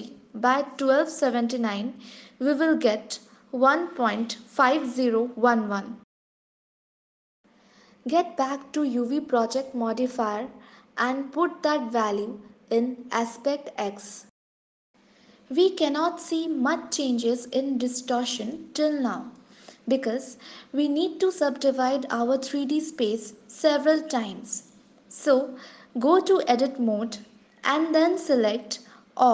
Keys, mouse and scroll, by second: 7.3 scroll down 3, 9.6 click, 11.7 click, 17.0 scroll up 3, 17.6 scroll down 2, 18.2 shift+middle click, 19.1 scroll up 1, 19.7 shift+middle click, 22.0 click, 25.2 s, 25.4 click, 25.9 click, 27.6 Tab.